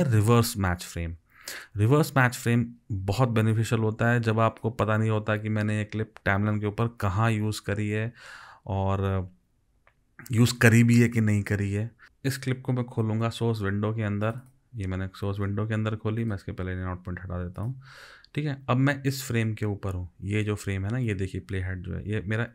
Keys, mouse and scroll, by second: 14.5 double click, 16.3 right click.